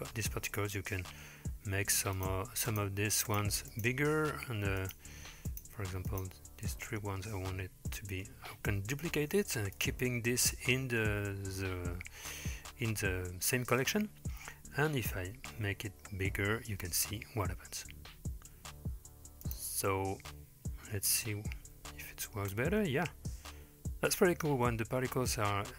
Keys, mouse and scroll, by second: 1.6-2.2 scroll up 3, 2.2 click, 2.7 shift+click, 3.3 shift+click, 3.7 shift+click, 4.8 shift+click, 5.5 shift+click, 6.9 middle click, 7.6-7.9 scroll down 2, 7.9 middle click, 9.2 shift+d, 11.1-11.6 scroll up 3, 11.6-13.0 scroll down 5, 13.0-14.2 scroll up 2, 14.2-15.0 scroll up 1, 15.2 s, 19.9-20.9 middle drag, 21.1 space.